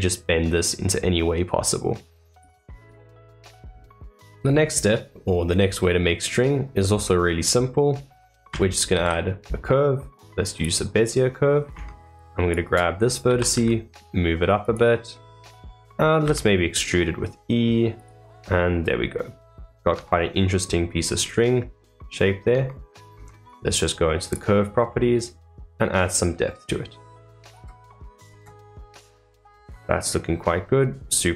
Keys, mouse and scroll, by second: 2.7 middle click, 3.9-4.4 middle drag, 4.4 scroll up 3, 4.8-8.9 middle drag, 8.9 shift+a, 11.0-11.7 middle drag, 11.7 Tab, 12.9 scroll up 2, 15.1 scroll down 3, 15.5 middle click, 18.3-19.9 middle drag, 19.9 Tab, 20.3-22.4 middle drag, 22.4 Tab, 23.1 Tab, 24.1 click, 26.1-28.3 drag, 28.7-31.3 middle drag.